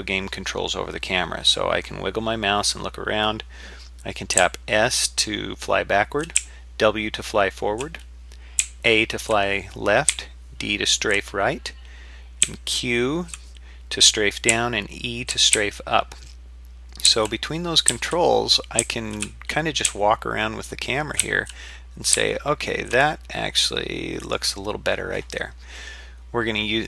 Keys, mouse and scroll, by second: 25.5-25.9 scroll up 4, 26.2-26.8 scroll down 2.